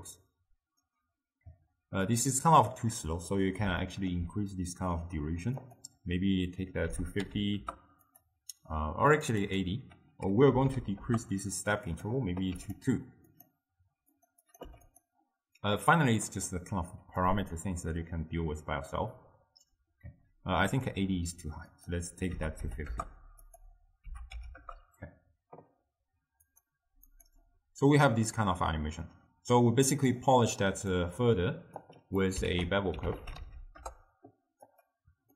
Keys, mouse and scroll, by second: 2.2-3.4 drag, 3.4-5.7 middle drag, 5.7-9.3 drag, 9.5-12.8 drag, 13.4 click, 14.5 click, 16.4-20.3 drag, 20.8-31.0 drag, 31.0 middle click, 31.9 click, 32.5 ctrl+a.